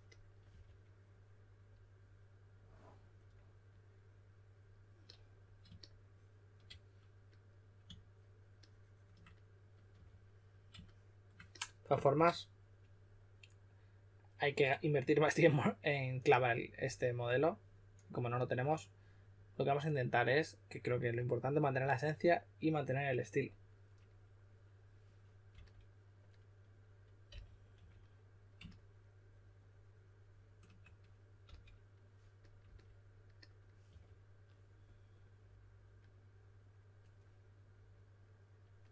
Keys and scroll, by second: 0.0-0.4 typing, 9.9 4, 25.5 typing, 27.2-27.7 typing, 31.4 s, 33.8 4.